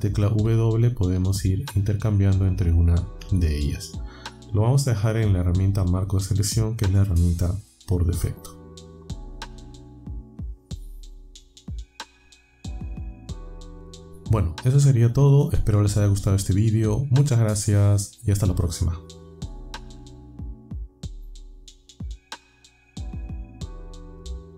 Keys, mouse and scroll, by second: 0.3-3.2 typing.